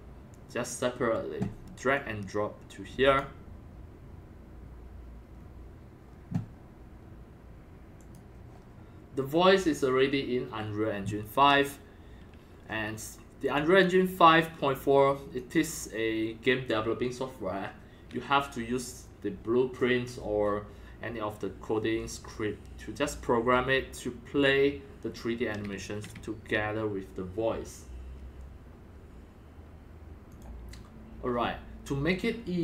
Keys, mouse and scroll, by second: 1.9-3.1 drag, 3.6-5.3 drag, 5.3 scroll down 2, 5.8 scroll, 8.0-13.2 drag, 13.4-14.6 drag, 15.3 click, 15.7-16.7 drag, 16.8 click, 16.9 click, 19.0 click, 19.1-20.6 drag, 30.3-32.6 drag.